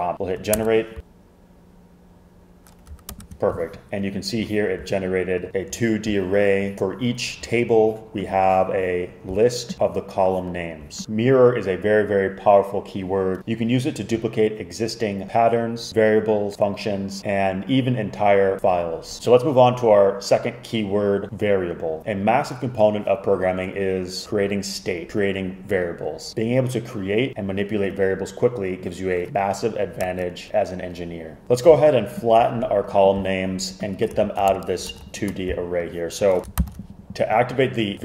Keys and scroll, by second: 0.4-1.2 typing, 3.2 super+Return, 34.3 alt+Left, 34.6 alt+shift+Right, 35.0 alt+shift+Right, 36.4 Return, 36.7 super+k.